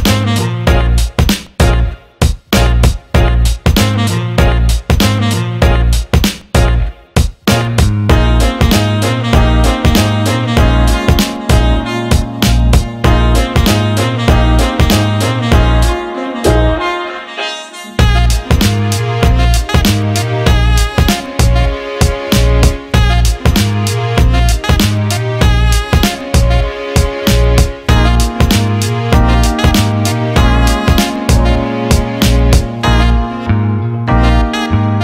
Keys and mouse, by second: 8.5 click, 9.7 shift+click, 11.5 ctrl+b, 17.5 Tab, 18.1 Tab, 19.3-22.8 ctrl+middle drag, 22.8 ctrl+KP_1, 23.7-25.8 ctrl+middle drag, 25.8 click, 26.0 click, 27.4 click, 28.6 shift+click, 29.8 ctrl+b, 34.8-35.0 drag.